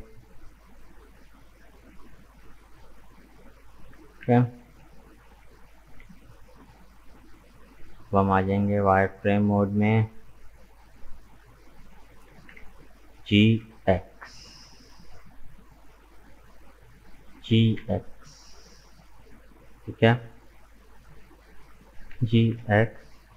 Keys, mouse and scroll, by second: 3.9 KP_1, 5.8 Tab, 8.3-12.3 drag, 12.3 g, 15.8-17.4 drag, 17.4 g, 20.9-22.1 drag, 22.1 g.